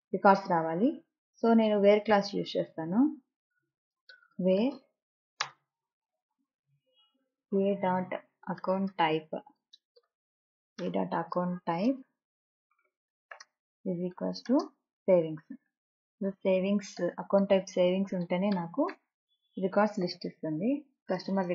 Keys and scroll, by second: 4.8 space, 6.0 e, 7.7 space, 11.2 y, 16.2 i, 20.9 a.